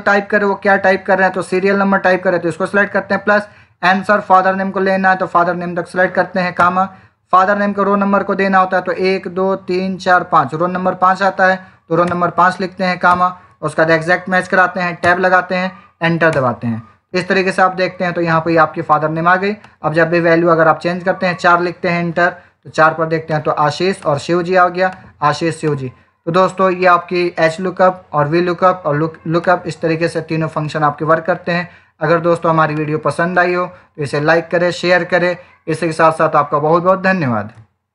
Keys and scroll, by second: 11.9 5, 14.3 Down, 16.2 Return, 21.7 4, 22.0 Return.